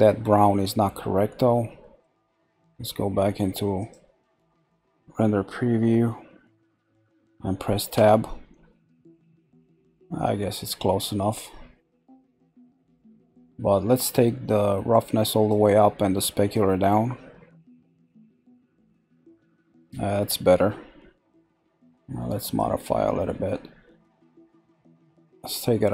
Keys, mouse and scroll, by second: 1.0-1.4 scroll down 2, 1.4-3.9 middle drag, 3.9 click, 8.0 Tab, 10.2-12.9 middle drag, 12.9-13.2 scroll down 1, 14.9 click, 19.4 scroll down 1, 22.4 click.